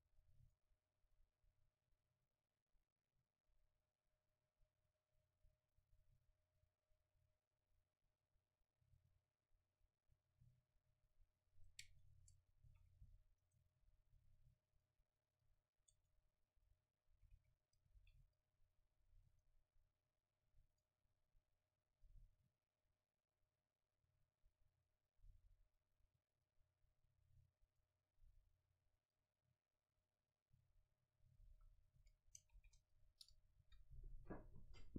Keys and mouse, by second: 12.1-13.5 right drag, 12.2 Tab, 12.8 a, 13.6-16.3 right drag, 14.8-17.2 drag, 16.3 Tab, 16.9 a, 17.4 middle click, 17.4 a, 17.7-19.4 middle drag, 18.0 ctrl+s, 19.4-26.9 drag, 28.7-32.4 drag, 32.4 a, 34.1 ctrl+s, 34.1 F12.